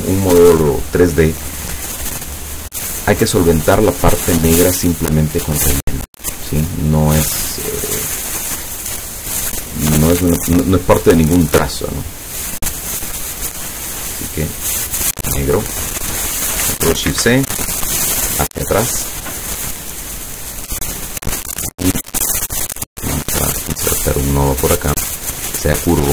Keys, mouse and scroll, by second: 0.1 click, 6.1 click, 11.5-14.2 drag, 15.0 click, 17.1 ctrl+shift+c, 17.5 ctrl+shift+click, 18.5 click, 22.8 click, 23.7 click, 25.7 click.